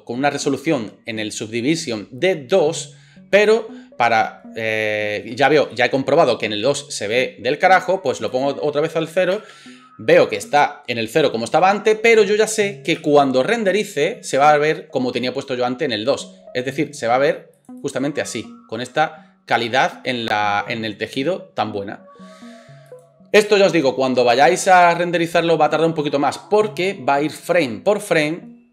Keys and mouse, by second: 9.3 space, 13.0 space.